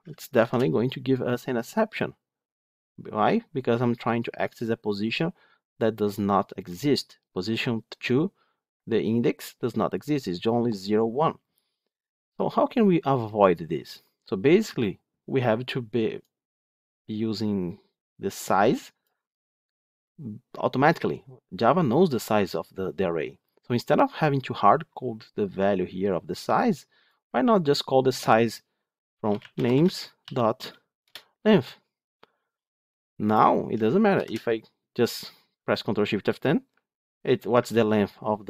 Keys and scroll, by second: 0.3 ctrl+shift+F10, 31.0 Return, 34.0 ctrl+shift+F10.